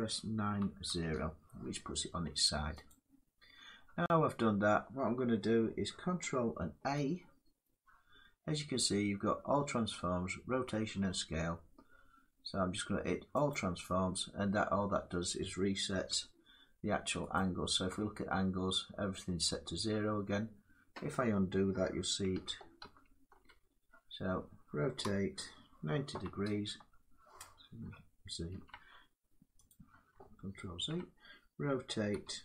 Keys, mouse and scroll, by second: 0.2-0.7 typing, 2.6 click, 6.4 ctrl+a, 9.0-11.5 drag, 15.6 click, 15.6 n, 17.0 click, 22.0 ctrl+z, 22.5 ctrl+z, 24.7 r, 25.8-26.2 typing, 27.5 typing, 28.2 ctrl+z, 29.4 click, 30.4 ctrl+z, 31.8-32.4 typing.